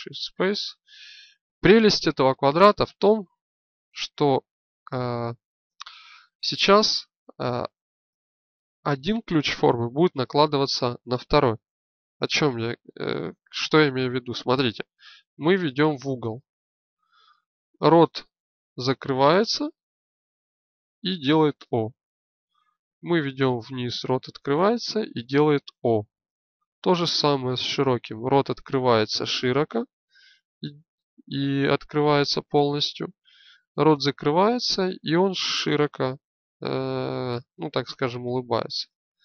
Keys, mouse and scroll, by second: 0.7 click, 3.2 alt+g, 14.7 g.